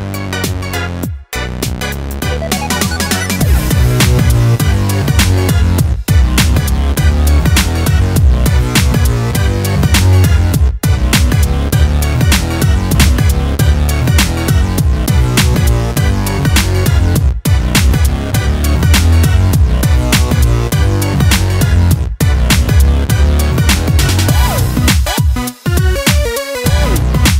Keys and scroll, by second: 3.8 ctrl+shift+e, 15.9 shift+F8, 17.2 shift+F7, 18.0 shift+F6, 23.9 ctrl+l.